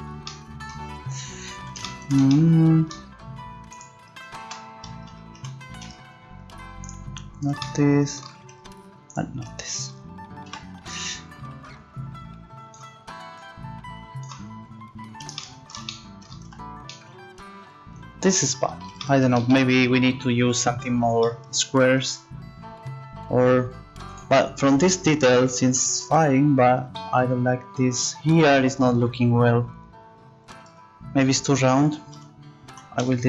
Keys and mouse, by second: 2.0 z, 3.7-5.5 right drag, 5.3 ctrl+z, 6.8-7.9 right drag, 10.5 z, 11.8-15.0 drag, 16.5 Tab, 30.7 Tab, 32.1 z, 32.7 z, 33.0 x.